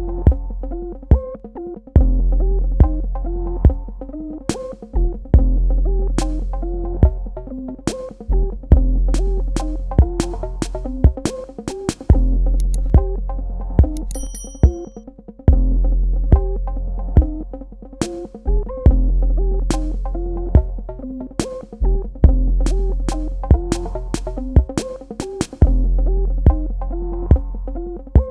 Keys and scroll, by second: 1.8 alt+shift+Num_Lock, 5.2 space.